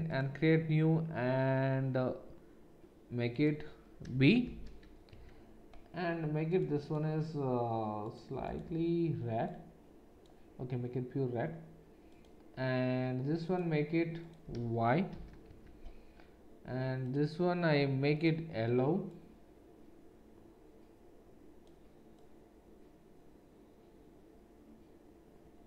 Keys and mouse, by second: 6.5 middle click, 6.8-10.4 drag, 10.4-13.4 middle drag, 13.4-17.0 drag.